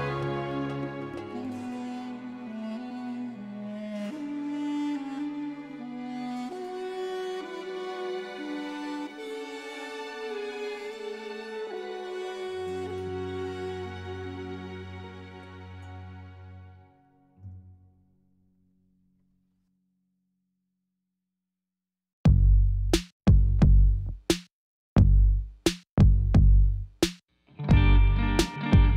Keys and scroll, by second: 2.4 Tab, 10.6 7, 10.8 shift+z, 11.6 r, 11.9 z, 13.5 g, 15.0 shift+z, 23.9 Tab, 24.9 2.